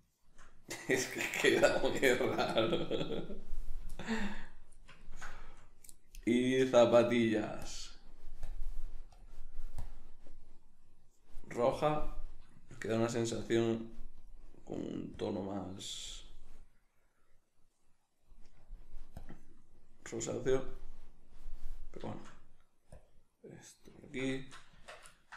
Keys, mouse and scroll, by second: 4.3 right click, 4.8-7.6 ctrl+middle drag, 7.6-11.8 drag, 11.8-13.4 middle drag, 13.4-16.3 drag, 16.3-19.1 middle drag, 19.1-22.4 drag, 22.4 shift+middle click, 22.9-23.3 drag, 23.3-25.3 middle drag, 24.7 Tab.